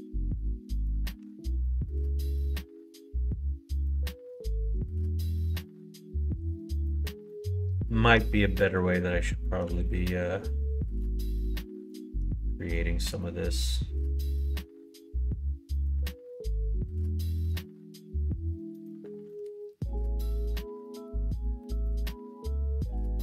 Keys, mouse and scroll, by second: 1.2 2, 1.4 click, 2.3 ctrl+b, 6.8 2, 7.7 alt+click, 8.5 middle click, 11.0 ctrl+f, 12.5 middle click, 13.2-14.6 middle drag, 17.0 shift+middle click, 21.6 middle click.